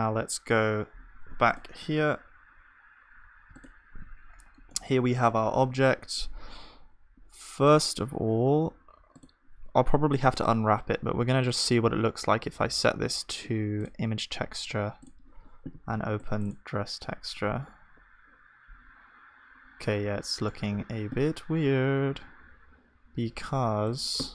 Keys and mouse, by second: 3.1 alt+h, 3.1 click, 4.7 click, 5.5-11.1 middle drag, 19.8-24.3 middle drag.